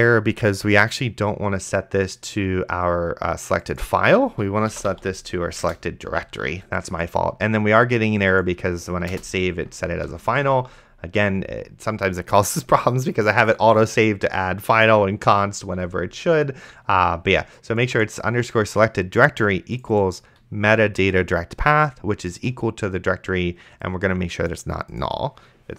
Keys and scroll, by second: 4.8 s, 5.1 e, 5.6 Return, 9.1 BackSpace, 10.6 ctrl+s.